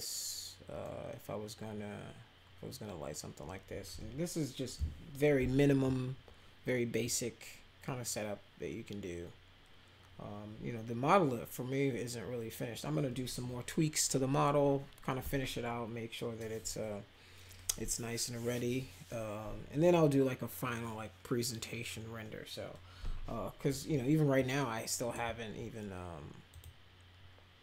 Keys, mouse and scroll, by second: 7.0 click, 24.3 click, 26.5 click.